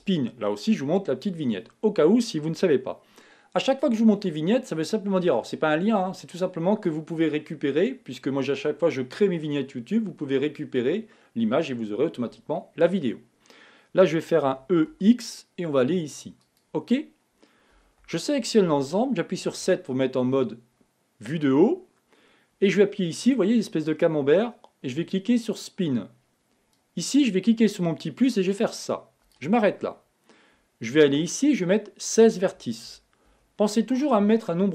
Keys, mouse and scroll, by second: 18.1 a, 18.3 a, 19.8 KP_7, 24.4-27.7 drag, 31.6-34.5 drag.